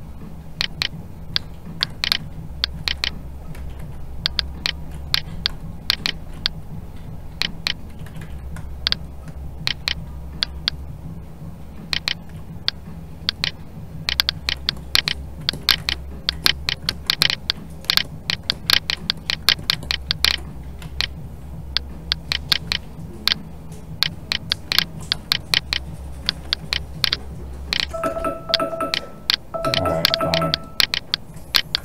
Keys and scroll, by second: 20.8 alt+a, 26.2 ctrl+z, 28.0 ctrl+z.